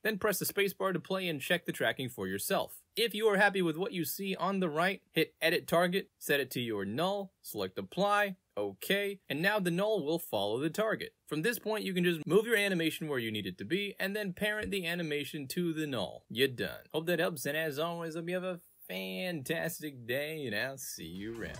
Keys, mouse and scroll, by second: 5.0 click, 5.4 click, 5.7 click, 6.2 click, 7.3 click, 8.3 click, 8.6-11.0 drag, 11.3 middle click, 11.3 scroll up 2, 11.5 click, 12.4 click, 12.5-14.0 drag, 15.3 click, 16.7 z.